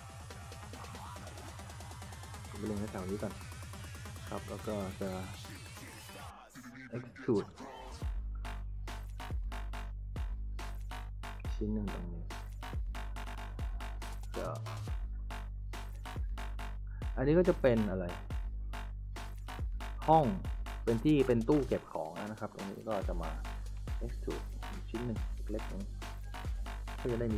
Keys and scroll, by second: 3.6-4.5 typing, 5.8-7.7 typing, 14.0-15.0 typing, 18.3 a, 19.0 w, 20.1 d, 25.4-27.3 typing.